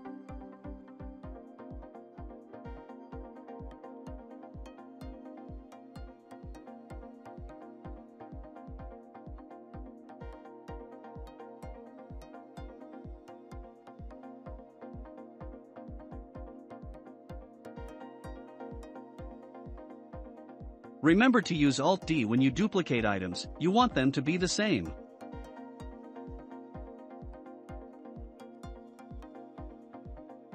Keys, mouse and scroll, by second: 0.7-1.1 scroll up 4, 1.1-2.2 middle drag, 2.2-5.2 drag, 5.4 s, 8.0 s, 10.2-12.9 shift+middle drag, 12.9 ctrl+a, 14.8 click, 17.1 click, 17.9 click, 18.5 click, 18.9-21.1 shift+middle drag, 25.2-25.5 drag, 25.5 scroll down 2, 25.9-30.5 shift+middle drag.